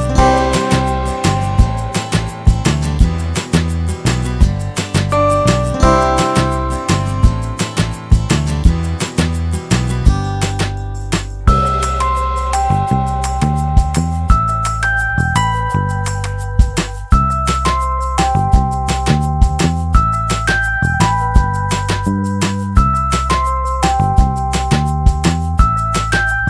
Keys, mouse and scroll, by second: 0.9-2.7 right drag, 1.7 g, 3.5-5.2 right drag, 4.2 g, 6.3-8.4 right drag, 6.8 g, 10.2-12.6 right drag, 10.8 g, 11.4 g, 13.1-14.9 right drag, 13.7 g, 15.4-16.8 right drag, 16.0 g, 16.8 click, 17.7-19.2 drag, 18.4 g, 19.3 click, 20.7-22.4 drag, 21.4 g, 23.6 click, 24.4-25.4 drag, 24.7 g.